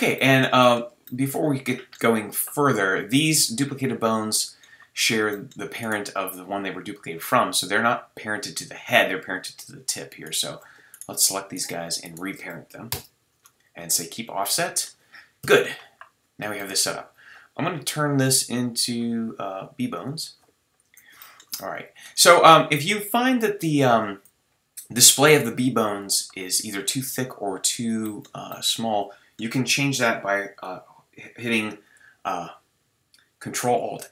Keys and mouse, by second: 5.8-14.0 right drag, 12.9 ctrl+p, 14.0 middle click, 14.8 right click, 15.4 KP_3, 21.2 click, 22.2 a, 22.6 a, 34.0 ctrl+alt+s.